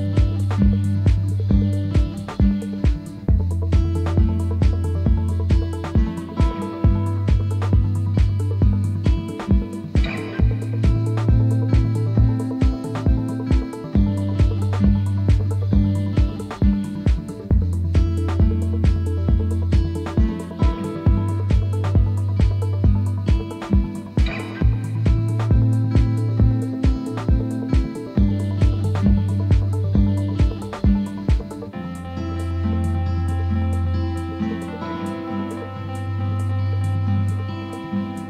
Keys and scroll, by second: 7.0 ctrl+t.